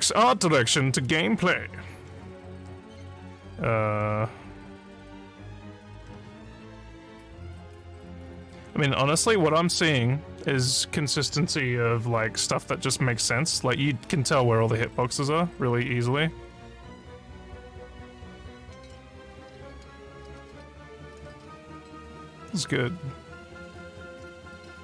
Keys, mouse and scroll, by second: 1.4 scroll down 1, 2.0 scroll down 1, 3.3 scroll down 2, 3.9 scroll down 1, 4.7 scroll down 2, 5.3 scroll down 1, 5.9 scroll down 2, 7.3 scroll down 2, 8.1 scroll down 1, 15.0 scroll down 3, 20.7 scroll down 2.